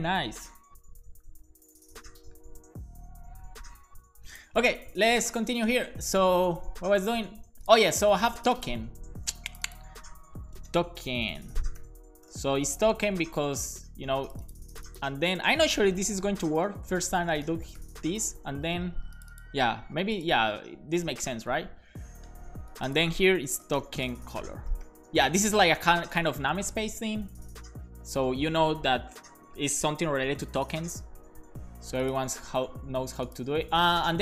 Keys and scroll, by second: 10.3-12.8 typing, 13.0 alt+shift+Left, 13.4 super+c, 15.9 super+v, 16.0-18.2 typing, 20.8 alt+shift+Left, 23.4-25.6 typing.